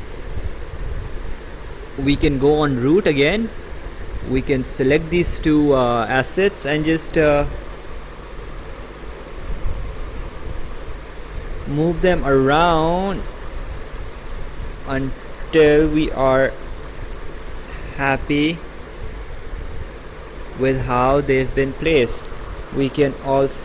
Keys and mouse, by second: 2.8 click, 4.1 click, 4.9 ctrl+click, 8.3 click, 9.9 click, 13.1 click, 15.9 click, 22.9 click.